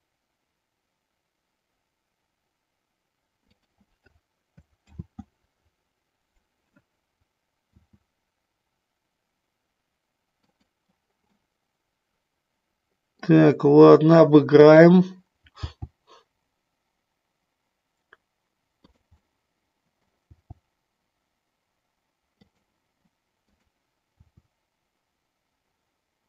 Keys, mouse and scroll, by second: 3.5 click, 4.8 ctrl+z, 7.7 s, 10.4 click, 11.3-13.3 middle drag, 14.6-15.7 drag, 15.7 g, 19.3 middle click, 20.3 g, 22.4 click, 23.4 click, 24.2 r.